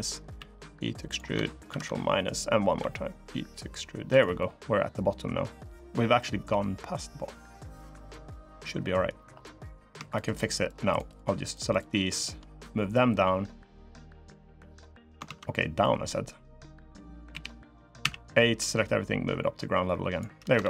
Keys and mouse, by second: 0.1 e, 1.4 ctrl+KP_Subtract, 2.5 e, 4.1 click, 5.7 click, 5.8 middle click, 7.7 click, 8.4 middle click, 9.5 click, 12.7-14.0 drag, 14.2 middle click, 15.0 ctrl+z, 15.6 click, 17.1 KP_1, 17.8 a, 18.6-19.9 drag, 20.4 ctrl+r.